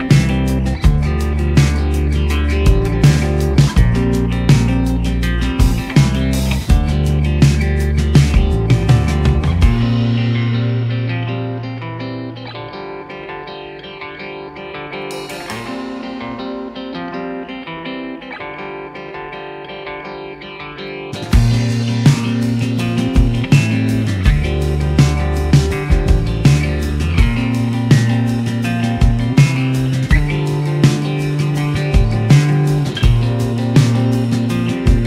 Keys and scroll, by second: 31.4 shift+a, 31.8 m.